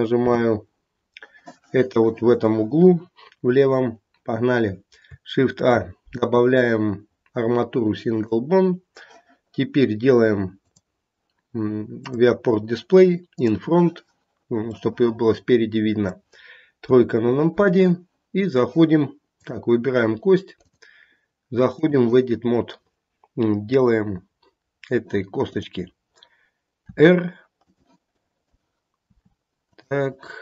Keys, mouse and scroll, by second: 0.2 n, 5.6 shift+a, 10.6 click, 11.9 click, 14.7 middle click, 16.0 middle click, 16.8 KP_3, 19.3 click, 20.6 click, 25.5 click, 26.9 r, 28.1 click, 29.1 r, 30.0 click.